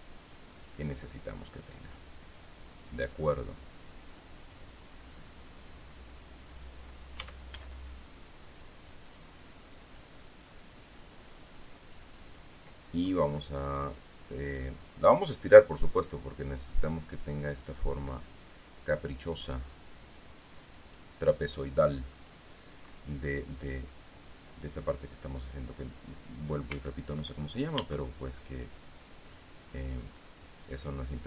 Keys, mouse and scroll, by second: 0.5 click, 1.4-2.5 middle drag, 7.2 middle click, 7.7 a, 9.1 click, 9.9 middle click, 10.5-12.7 drag, 14.5-16.3 drag, 17.8-20.0 drag, 20.7-21.7 drag, 27.3 a, 28.3 b, 28.7-29.9 drag, 31.0-31.2 drag.